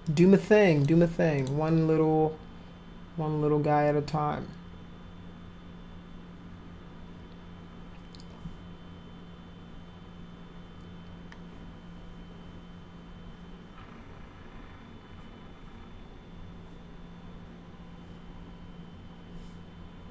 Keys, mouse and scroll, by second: 0.0 click, 1.4 click.